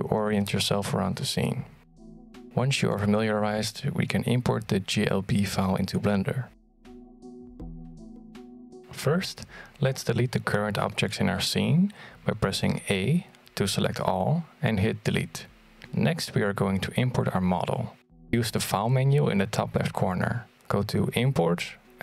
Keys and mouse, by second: 1.8-5.4 drag, 6.5-8.8 drag, 12.7 a, 14.2 x, 17.5-22.0 drag.